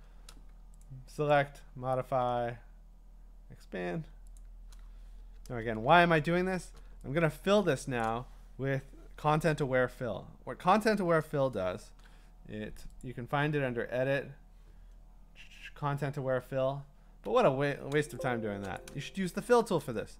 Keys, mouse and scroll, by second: 0.8 click, 1.3 click, 4.4 click, 5.5 Return, 6.1 scroll, 8.0 click, 10.4-12.0 scroll, 13.0 click, 17.3 Escape, 17.9-18.6 Escape, 18.8 click, 19.2 scroll.